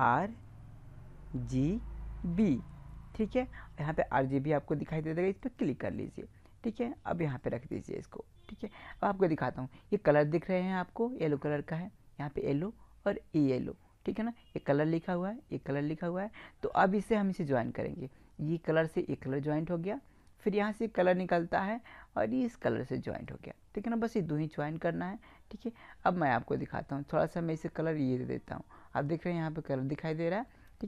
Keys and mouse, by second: 7.5-9.3 drag, 9.3-12.2 middle drag, 17.0-19.0 drag, 20.7-22.6 drag, 27.6-29.4 drag.